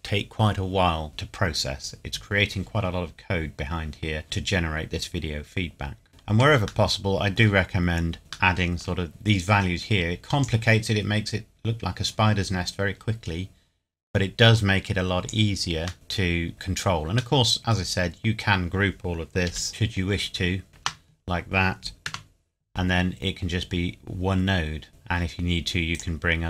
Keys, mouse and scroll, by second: 3.6-4.2 scroll up 1, 6.1 middle click, 6.8 shift+middle click, 7.8-8.2 scroll up 1, 8.5 shift+middle click, 9.1 click, 14.5 click, 15.9 middle click, 16.3-17.3 scroll down 1, 17.3 middle click, 17.7-18.0 scroll down 1, 19.5 b, 19.7 click, 20.7 ctrl+g, 22.0 Tab, 22.9 scroll up 1, 24.9 click.